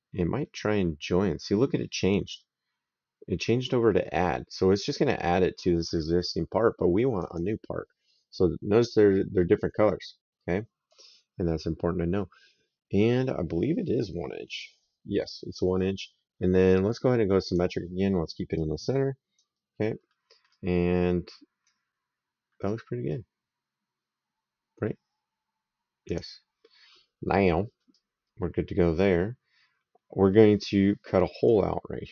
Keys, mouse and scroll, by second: 7.0 click, 8.6 right click, 17.3 click, 18.4 right click, 19.9 middle click, 25.9 click, 27.7 right click.